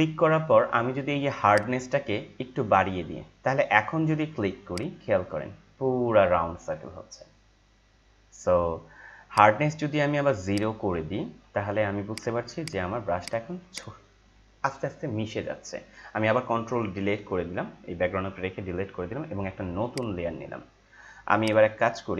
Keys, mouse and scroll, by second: 1.5-4.7 drag, 9.3 right click, 10.4 right click, 10.5-12.1 drag, 16.4 click, 18.3 ctrl+Delete, 19.9 click, 21.4 right click.